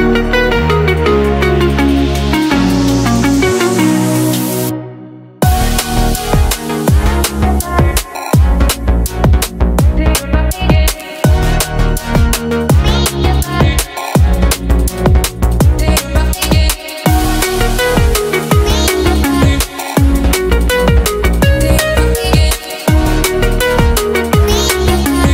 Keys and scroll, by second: 14.6 Return, 15.8 ctrl+v, 21.5-23.4 typing.